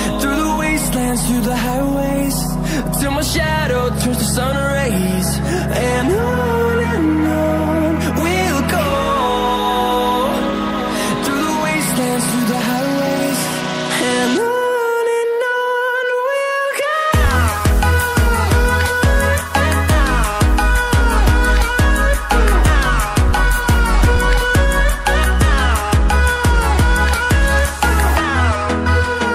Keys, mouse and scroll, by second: 0.6 click, 4.8-5.2 scroll up 1, 5.2-5.6 scroll down 1, 5.6-6.3 scroll up 1, 6.3 click, 12.7 ctrl+alt+z, 13.5 typing, 17.6 click, 18.2 scroll down 1, 18.9-20.2 scroll up 1, 20.8 click, 28.8 click.